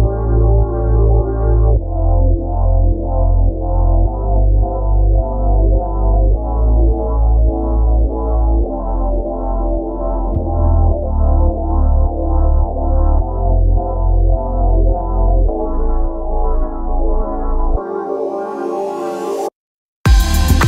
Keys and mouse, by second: 0.2 click, 3.5 click, 7.0 click, 10.3 click, 11.9 click.